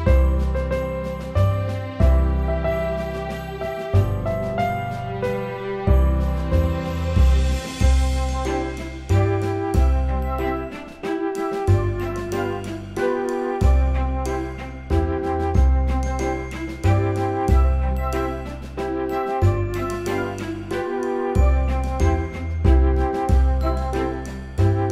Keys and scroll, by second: 2.8 super+c, 4.0 shift+super+v, 5.8 ctrl+0, 17.1 Return, 17.4 Right, 17.7-19.0 typing, 19.3 super+d.